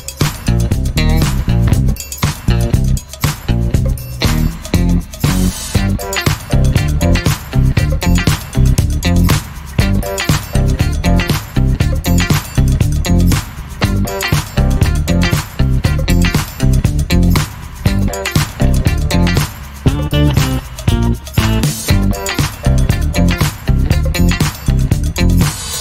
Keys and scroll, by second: 17.0 Escape.